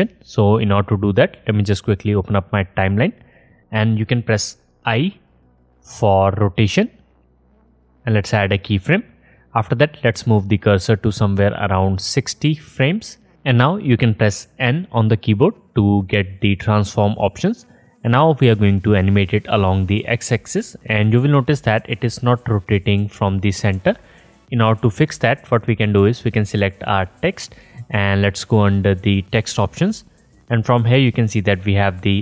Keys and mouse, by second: 4.9 i, 7.1-8.3 drag, 9.8-26.3 drag, 14.9 n, 23.7 ctrl+z, 24.6 ctrl+z, 26.3-32.2 middle drag.